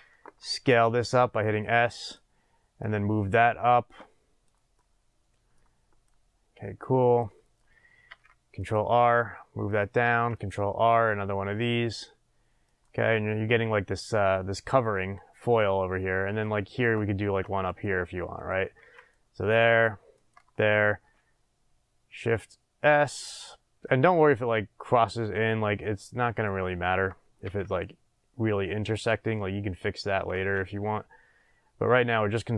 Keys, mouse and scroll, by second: 0.5 s, 2.1 click, 2.8-4.7 drag, 4.7-6.0 middle drag, 6.0-9.8 drag, 8.1 ctrl+r, 10.1 ctrl+r, 12.8 click, 14.9-16.3 middle drag, 15.8 scroll down 2, 17.3 ctrl+r, 18.4 click, 18.8 ctrl+r, 20.3 click, 21.0 s, 23.1 click, 23.8-29.0 drag, 27.4 ctrl+r, 29.3 middle click, 30.3 ctrl+r.